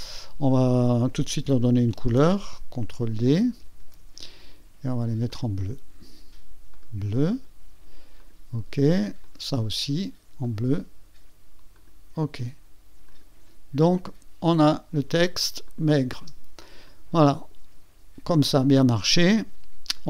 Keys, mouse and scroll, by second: 3.8 ctrl+d, 5.3 click, 6.7 click, 8.2 click, 9.2 click, 10.4 click, 11.7 click, 13.1 click, 14.0 click, 14.3 click, 15.7 click, 16.1 space, 16.8 space, 16.9-17.7 drag, 19.9 click.